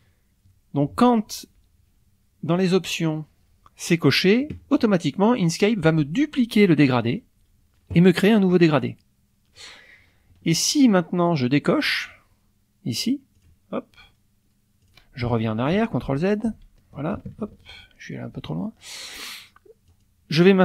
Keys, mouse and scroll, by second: 0.5 middle click, 2.6 click, 5.4 click, 6.8 click, 11.3 click, 13.3 click, 14.8 click, 16.0 ctrl+z, 17.3 ctrl+shift+z, 19.9 click.